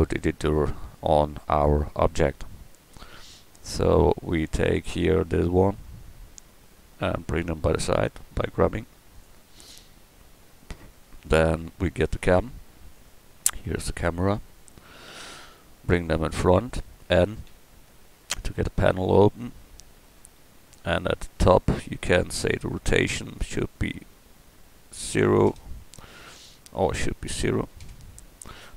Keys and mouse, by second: 3.0 b, 7.6 g, 11.2 a, 13.0-14.5 right drag, 17.5 n, 18.2 n.